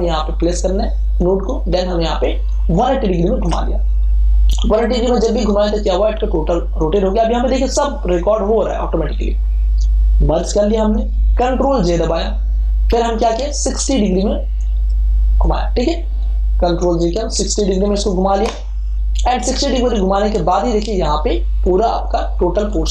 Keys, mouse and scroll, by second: 1.4 right click, 2.6 click, 3.3 Return, 10.6 ctrl+e, 11.8 ctrl+j, 12.6 ctrl+t, 14.5 click, 17.2 6, 21.6 Return.